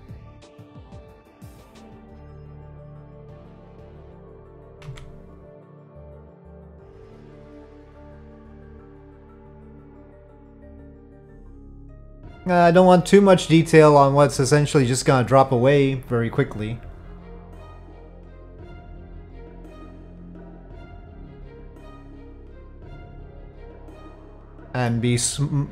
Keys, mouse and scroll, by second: 1.9-4.5 drag, 1.9 1, 1.9 c, 4.8 Tab, 5.3 click, 7.0 click, 8.4-8.9 middle drag, 10.0-10.6 middle drag, 11.3-12.9 middle drag, 17.2-21.4 drag, 21.9-24.1 middle drag, 24.3-24.8 middle drag.